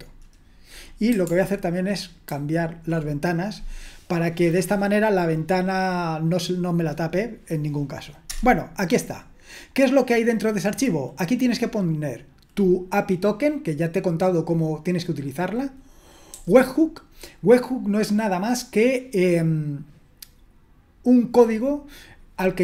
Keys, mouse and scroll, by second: 2.4 super+h, 8.3 Return, 16.3 j.